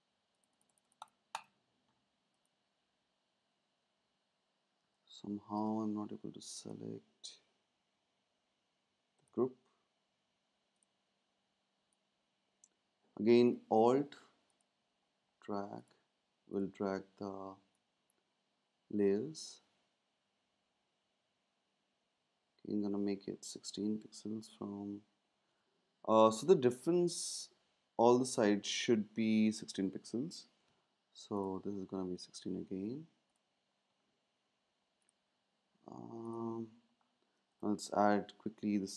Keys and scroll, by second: 4.8 space, 13.7 super+z, 26.1 Down, 26.2 Down.